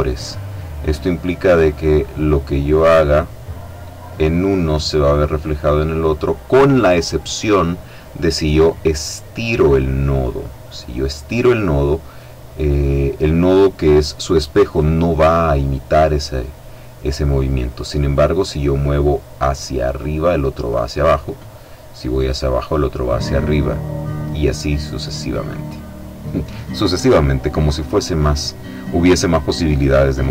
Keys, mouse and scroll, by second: 1.4-26.5 drag.